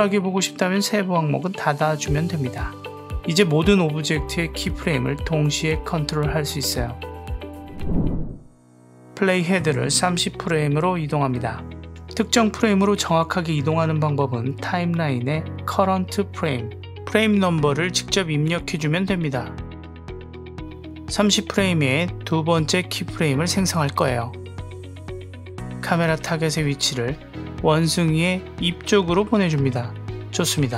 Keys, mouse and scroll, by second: 2.2 click, 2.9 click, 3.4 click, 5.0 click, 9.2-11.4 drag, 13.5 drag, 13.8 drag, 14.1 click, 14.5 click, 17.2-19.7 drag, 18.5 BackSpace, 27.0-28.1 drag, 28.8 click.